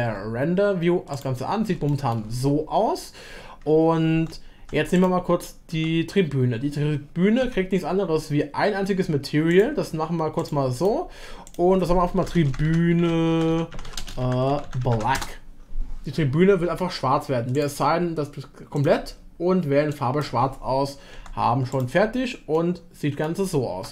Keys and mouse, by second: 1.9 shift+middle click, 4.1 Tab, 4.6 Tab, 5.7 Tab, 7.4 a, 9.5 click, 10.8 click, 11.6-15.7 drag, 21.2 Tab, 22.5 click, 23.0 middle click.